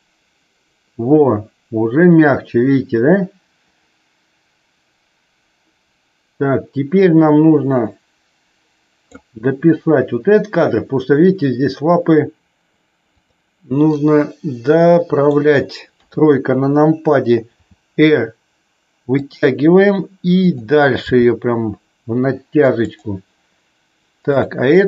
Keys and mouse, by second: 13.1-13.7 drag, 13.8-15.3 middle drag, 15.9 KP_3, 17.5 r, 20.3 click, 21.1 g, 24.2 click.